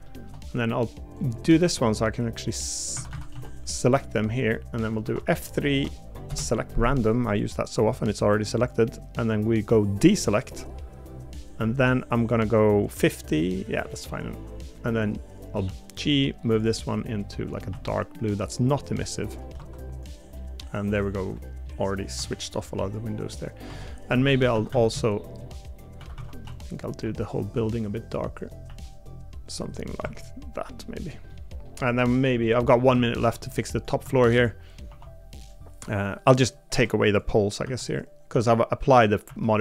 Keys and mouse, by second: 0.0 shift+middle click, 3.1 a, 3.3 b, 4.5 middle click, 5.0 F3, 13.8 middle click, 17.2 shift+middle click, 17.7 g, 19.5 Tab, 20.3 middle click, 21.2 middle click, 22.1 z, 23.7 Tab, 24.1 a, 24.5 a, 25.0 shift+middle click, 26.0 a, 26.2 a, 26.4 b, 27.0 g, 28.6 g, 30.0 Tab, 31.3 middle click, 32.6 middle click, 33.0 shift+middle click, 34.0 Tab, 34.8 3, 36.2 Tab, 36.7 Tab, 37.1 click, 37.6 l, 38.3 l.